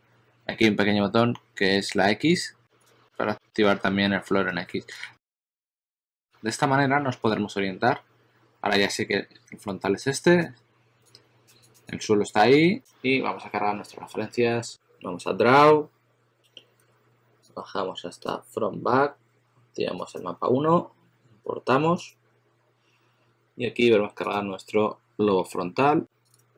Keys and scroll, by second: 4.7 shift+super+x, 5.7 shift+super+d, 5.9 shift+super+d, 6.1 shift+super+x.